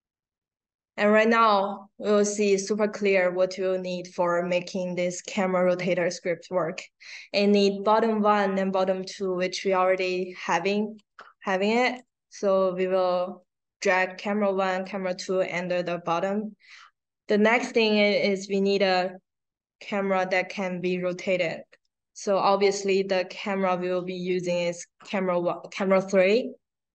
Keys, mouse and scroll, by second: 9.9-11.9 drag, 13.3-14.7 drag, 22.6-24.9 drag.